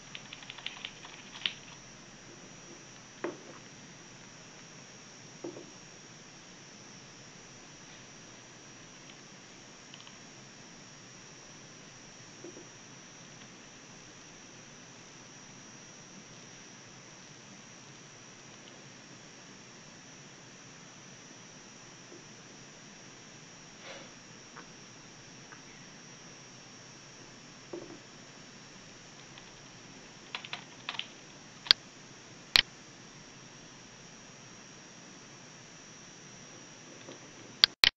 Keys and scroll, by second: 3.8 w, 5.7 w, 8.0-8.7 typing, 16.3 w, 35.3 Escape.